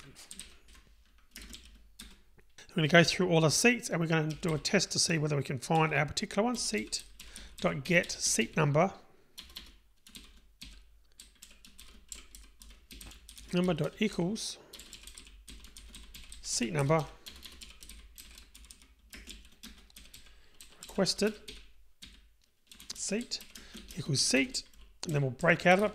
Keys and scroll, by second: 0.5 Delete.